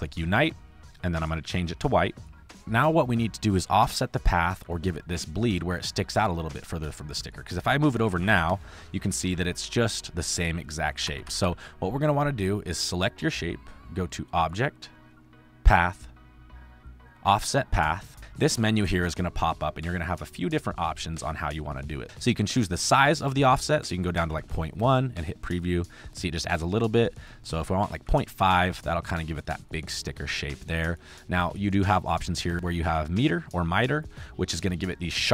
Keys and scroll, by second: 2.5 space, 4.4 space, 5.0 space, 5.9 space, 7.1 space, 7.9 Left, 9.1 ctrl+2, 9.9 ctrl+1, 11.0 Right, 12.4 space, 24.1 ., 24.2 KP_1, 27.9 ., 28.0 KP_5, 28.4 5.